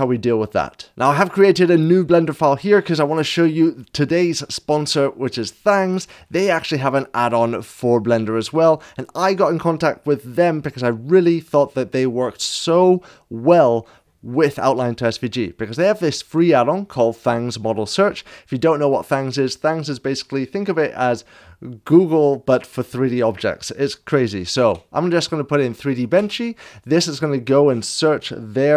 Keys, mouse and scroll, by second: 0.9 click, 0.9 middle click, 8.5 click, 18.2 click, 24.5 ctrl+v, 26.1 Return, 26.1 l.